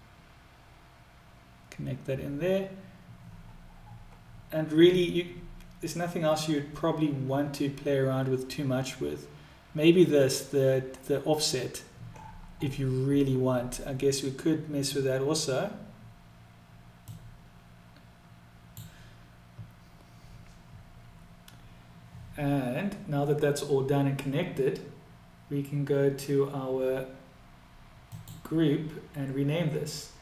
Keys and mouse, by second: 17.1-22.3 drag, 28.2 click.